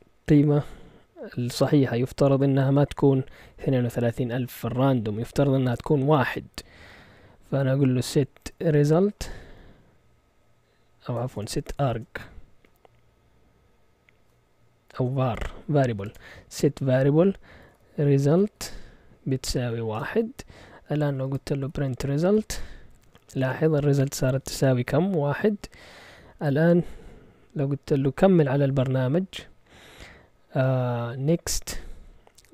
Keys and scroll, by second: 8.3-9.8 typing, 11.2-13.1 typing, 14.9-16.4 typing, 17.5-19.9 typing, 21.1-22.5 typing, 22.5 Return, 31.9-32.5 typing.